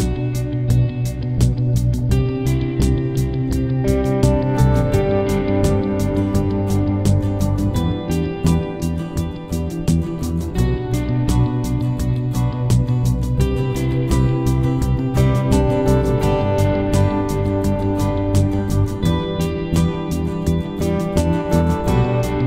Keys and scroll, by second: 10.0 -, 11.3 8, 11.6 0, 13.2 Return.